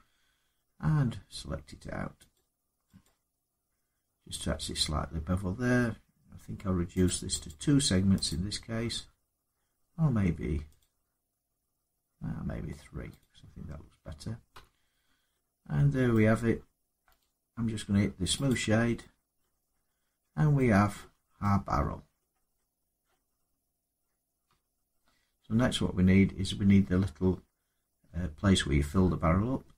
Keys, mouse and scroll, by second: 2.1 click, 2.8 click, 6.8 click, 7.2 click, 8.1 click, 10.5 click, 13.0 click, 14.3 Tab, 14.8 middle click, 14.9 scroll down 3, 15.9 middle click, 17.0 right click, 18.2 click, 19.2 middle click, 19.5 scroll up 4, 20.0 Tab, 20.7 middle click, 20.9 Tab, 21.0 scroll, 22.0 middle click, 22.2 scroll down 1, 22.5 scroll up 1, 22.8 middle click, 23.1 scroll up 2, 23.1 scroll down 2, 24.2 Tab.